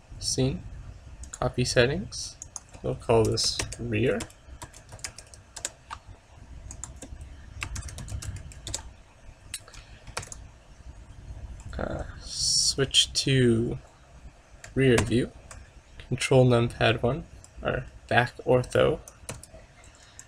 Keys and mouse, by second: 4.2 click, 6.8-8.7 drag, 10.3 ctrl+s, 15.1 ctrl+KP_1, 17.1 ctrl+KP_1, 19.4 shift+a.